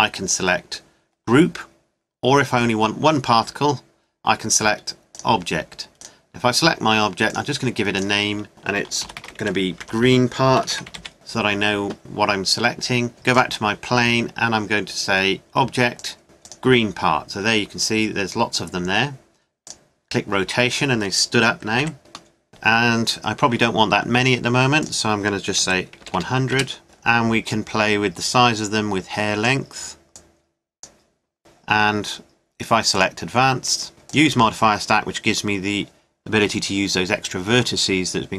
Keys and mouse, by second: 4.1-5.1 middle drag, 9.4 middle click, 9.7 e, 12.0-15.0 drag, 15.0 middle click, 15.9 click, 18.0-19.7 middle drag, 21.9 KP_1, 26.3 KP_0, 27.5-29.5 middle drag, 30.1-31.4 middle drag, 32.1-33.9 drag, 34.1-35.9 drag.